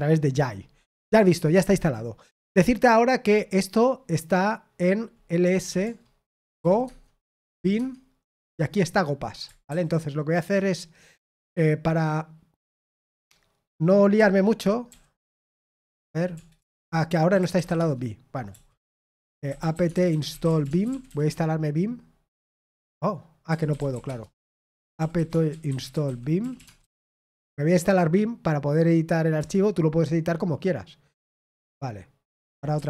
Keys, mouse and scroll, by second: 9.7 ctrl+c, 14.1 v, 21.0 typing, 21.3 Return, 27.7 typing, 29.3 Return.